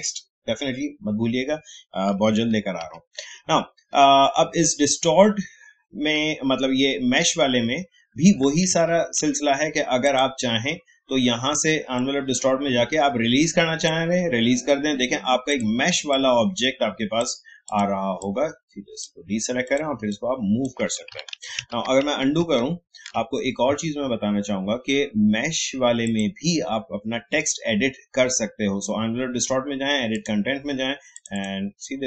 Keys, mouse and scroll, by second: 2.1 click, 2.8 ctrl+z, 6.1 ctrl+z, 8.7 ctrl+shift+z, 10.0-21.3 drag, 21.3 ctrl+z, 26.0 click, 30.1 click.